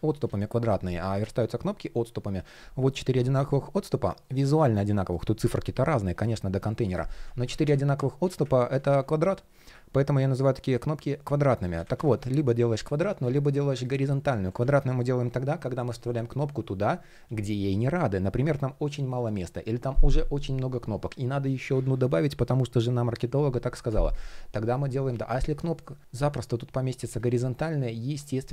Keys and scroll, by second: 4.6 shift+p, 7.1 super+z, 11.2 super+z, 14.1 super+z.